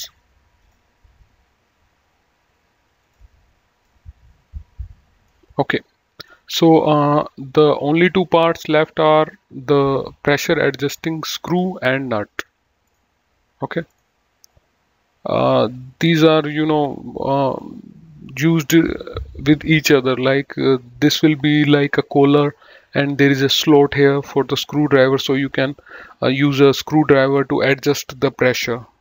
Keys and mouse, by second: 0.9 click, 3.3 click, 4.2 middle click, 6.5 click.